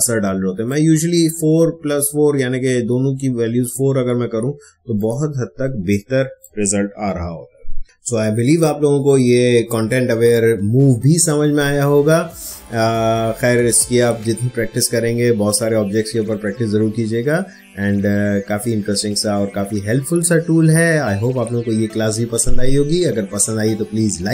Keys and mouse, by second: 4.9 click, 5.5 ctrl+space, 5.8 ctrl+click, 6.1 ctrl+space, 6.9 ctrl+d.